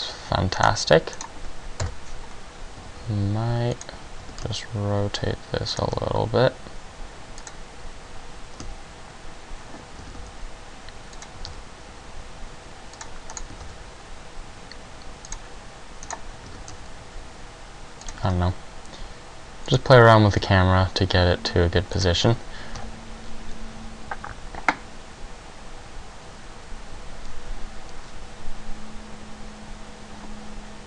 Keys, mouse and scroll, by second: 0.8 right click, 1.4 right click, 2.0 KP_0, 2.9 g, 3.9 click, 4.4 r, 5.9 click, 6.1 g, 7.6 click, 8.7 x, 10.2 r, 11.2 click, 11.3 g, 13.2 click, 13.7 right click, 13.8 g, 15.5 click, 16.3 right click, 16.5 r, 18.0 click, 18.2 g, 19.9 click, 20.5 g, 22.1 click.